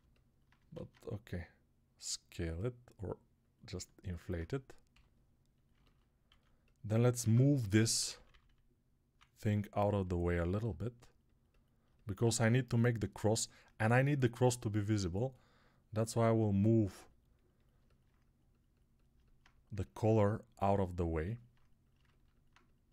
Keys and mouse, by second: 0.6 alt+s, 4.8 g, 6.2 alt+q, 7.1 ctrl+Tab, 7.4-9.0 typing, 11.7-22.9 alt+drag.